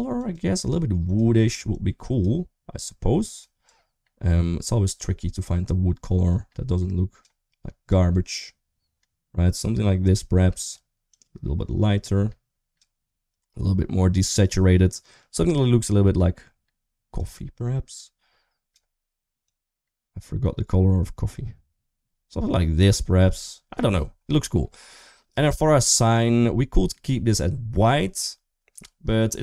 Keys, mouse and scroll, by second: 25.8 click, 26.2 middle click, 28.5 click.